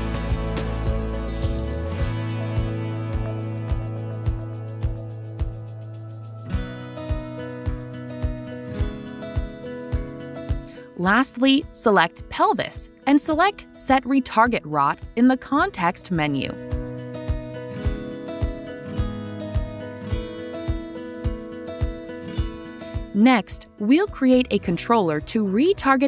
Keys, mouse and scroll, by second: 3.4 click, 4.8 click, 7.8 click, 9.3 click, 10.7 right click, 12.3 click, 14.5 click, 20.8-21.7 scroll, 21.7-22.6 scroll, 23.0 right click, 24.6 right click.